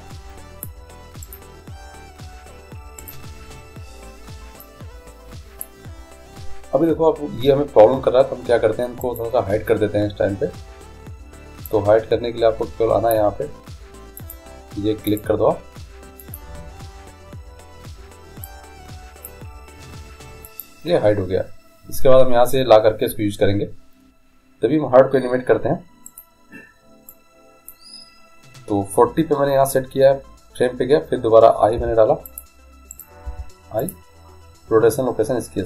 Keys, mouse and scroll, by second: 0.3-1.5 drag, 1.6-3.2 right drag, 4.9-6.8 drag, 4.9 right click, 9.2-11.0 right drag, 11.8-13.7 drag, 14.3-18.2 drag, 18.6-20.5 drag, 20.6-22.5 drag, 26.2-28.1 right drag, 27.3-29.1 drag, 31.9 i, 33.1 right click, 33.5 i.